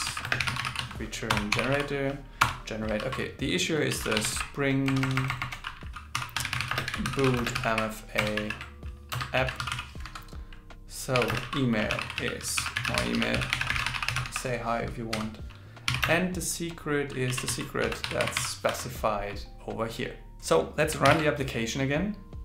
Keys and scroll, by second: 3.0 shift+2, 3.9 shift+s, 6.9-9.4 typing, 11.4 shift+2, 12.6 alt+l, 21.1 ctrl+shift+r.